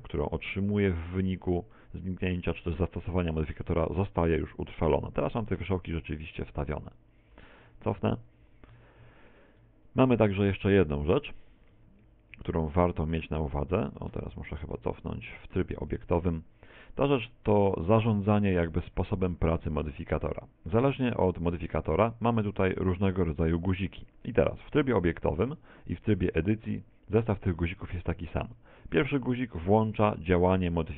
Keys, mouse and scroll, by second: 1.8 middle click, 2.8 middle click, 4.4 right click, 4.8 right click, 5.2 right click, 5.6 right click, 6.0 right click, 6.3 right click, 6.6 right click, 7.4 ctrl+z, 7.7 ctrl+z, 8.0 ctrl+z, 8.2 ctrl+z, 8.4 ctrl+z, 8.5 ctrl+z, 8.8 ctrl+z, 9.0 ctrl+z, 11.2 ctrl+z, 11.8 ctrl+z, 12.0 ctrl+z, 12.4 ctrl+z, 12.6 ctrl+z, 13.0 ctrl+z, 13.2 ctrl+z, 13.4 ctrl+z, 13.6 ctrl+z, 14.2 Tab, 14.4 ctrl+z, 14.8 ctrl+z, 24.4 Tab, 25.6 Tab, 29.4 click.